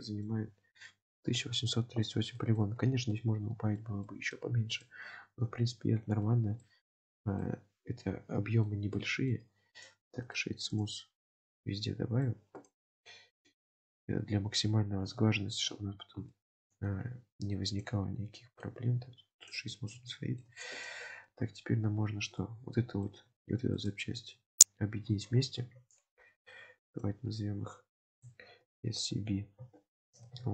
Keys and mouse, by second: 0.0 shift+middle drag, 2.4 shift+middle drag, 3.2-3.8 middle drag, 4.1 shift+middle drag, 4.7 click, 5.5 KP_Decimal, 6.7-7.1 shift+middle drag, 7.5-8.8 middle drag, 9.0-9.4 shift+middle drag, 9.8 click, 10.5-11.5 right drag, 11.5-12.3 middle drag, 12.7 click, 14.1-15.2 middle drag, 15.4-15.7 shift+middle drag, 16.4 shift+middle click, 17.8 click, 20.1-20.4 shift+middle drag, 20.8 click, 22.4-23.1 middle drag, 23.9 shift+click, 26.8 click, 27.1-30.5 drag.